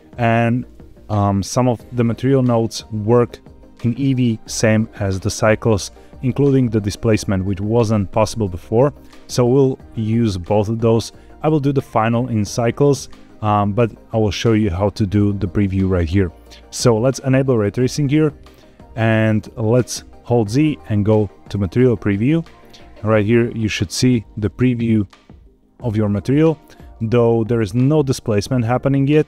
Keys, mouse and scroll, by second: 5.8 middle click, 8.2 middle click, 17.4 click, 20.2 z, 23.0-26.0 middle drag, 26.1 scroll down 3, 26.7 shift+middle drag, 27.4-27.7 scroll up 2, 27.7-29.2 middle drag.